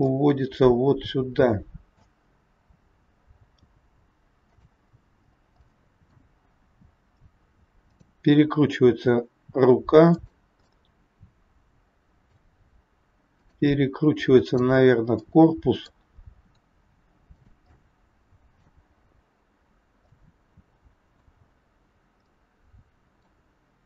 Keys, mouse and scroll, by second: 0.2 middle click, 5.0 scroll down 2, 5.7 middle click, 5.7 scroll down 2, 6.6 scroll up 2, 7.8 click, 8.7 r, 10.7 middle click, 13.3 click, 14.3 click, 15.2 middle click, 16.3 r, 17.8 middle click, 17.8 scroll up 1, 20.1 middle click, 21.5 scroll down 1, 22.2 middle click.